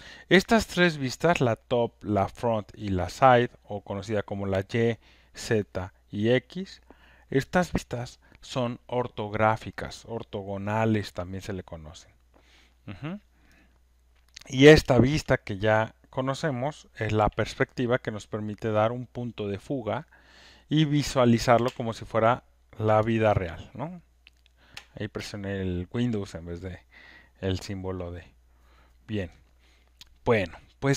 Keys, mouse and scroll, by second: 18.7 super+click, 21.8 super+click, 25.0-29.8 alt+drag.